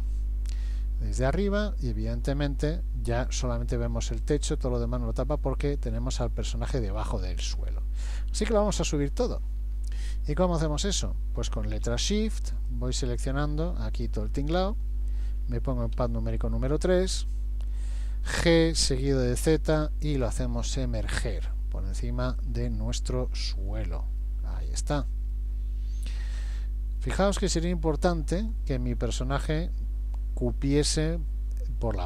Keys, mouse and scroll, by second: 0.6 KP_7, 1.9-2.9 scroll down 7, 3.5 middle click, 3.5 scroll down 2, 4.8 middle click, 6.9-7.8 scroll up 4, 7.8-9.2 scroll up 2, 10.2 middle click, 12.0 shift+click, 12.6 shift+click, 14.0 shift+click, 14.5 shift+click, 16.0 KP_3, 17.2 scroll down 1, 18.5 g, 23.0 middle click, 23.8-24.2 scroll down 4, 24.2 shift+middle click, 24.8 scroll up 2, 25.3 middle click, 27.3-28.0 scroll up 2, 28.1 shift+middle click, 28.7 middle click.